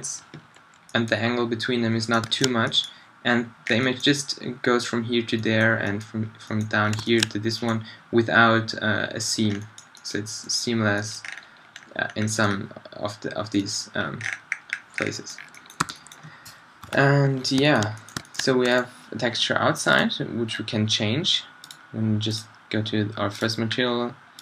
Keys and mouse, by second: 2.8-3.6 middle drag, 7.1 middle click, 9.4 middle drag, 12.2 middle drag, 12.4-13.8 middle drag, 14.1 middle click, 15.6 middle click, 15.9 a, 16.0 middle click, 16.9 shift+Left.